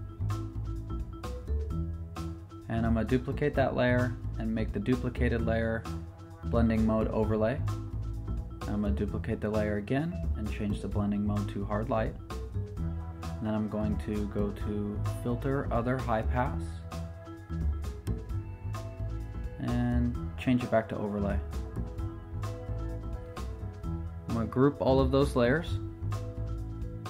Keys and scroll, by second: 2.9 super+j, 9.0 super+j, 24.7 super+g.